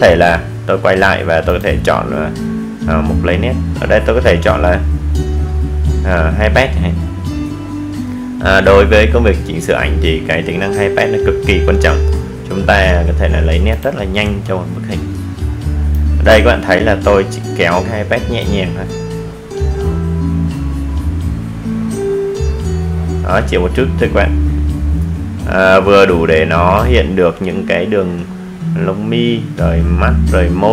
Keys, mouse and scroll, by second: 6.2-21.4 drag, 24.2-26.6 drag.